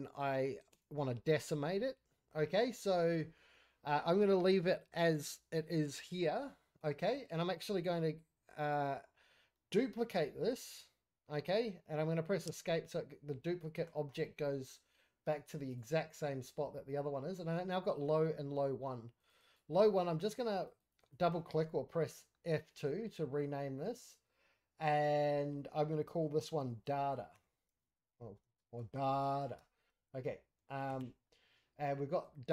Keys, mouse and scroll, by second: 1.7-2.4 scroll up 3, 1.9 middle click, 2.4-2.9 scroll down 5, 2.9 shift+middle drag, 3.3 scroll up 1, 3.4 scroll down 1, 3.5-9.4 middle drag, 4.5 scroll up 1, 4.7-6.0 scroll down 1, 6.0-6.4 scroll up 1, 6.4-9.1 scroll down 2, 9.1-9.5 scroll down 1, 10.3 shift+d, 15.6 click, 19.2 click, 26.9 shift+a, 28.6 BackSpace.